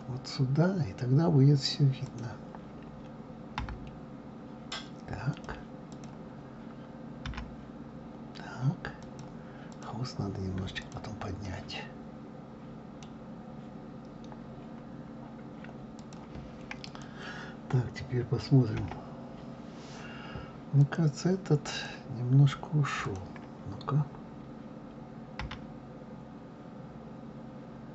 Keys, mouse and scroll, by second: 0.6-2.1 scroll up 3, 2.1 click, 3.6 g, 5.9 click, 7.3 g, 9.7 click, 10.8 click, 11.4-13.4 middle drag, 13.4-14.4 scroll down 3, 14.4 scroll up 1, 15.0-15.4 scroll down 1, 15.9 scroll down 1, 16.0 click, 16.8 click, 18.8 KP_1, 20.8 click, 21.7 click, 23.0 click, 25.4 g.